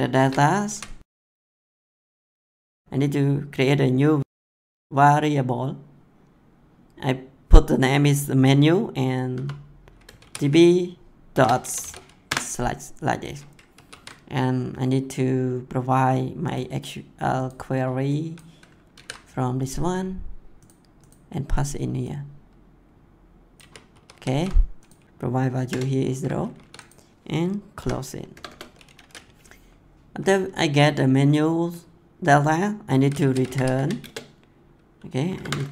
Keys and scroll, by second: 0.1-2.2 typing, 9.3-12.0 typing, 12.2 Return, 13.7 ctrl+s, 18.9 ctrl+c, 23.5 ctrl+v, 25.0 BackSpace, 25.6 0, 26.3 ctrl+s, 27.7 ;, 28.3 Return, 33.2 r, 34.0 space, 35.2 [.